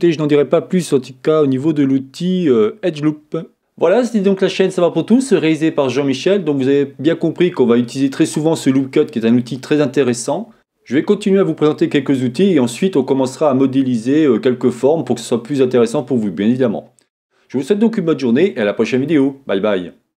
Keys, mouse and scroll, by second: 0.0-1.1 middle drag, 1.4-20.2 drag.